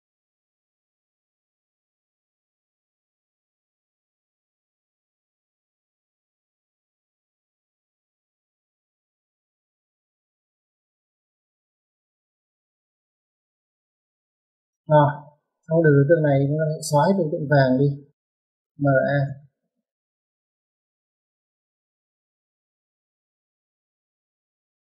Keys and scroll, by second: 11.5-12.1 typing, 14.5 Escape, 14.7 Escape, 15.3 m, 15.8 a, 16.1 space, 17.9 space, 22.2 typing.